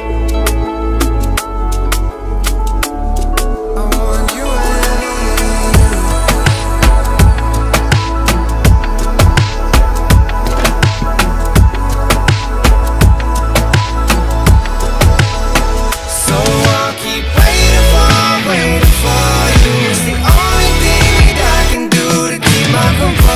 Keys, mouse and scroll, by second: 1.0 click, 1.3 alt+scroll up 1, 1.8-2.3 scroll up 1, 2.5 ], 2.6 ], 2.7-5.4 drag, 5.2-6.0 typing, 5.7 alt+scroll down 1, 6.5 click, 7.3 ctrl+j, 8.1 ctrl+t, 8.2-13.2 drag, 13.2-16.2 alt+shift+drag, 16.5 click, 21.9 alt+scroll down 1, 22.4 alt+scroll up 1, 22.9-23.3 drag.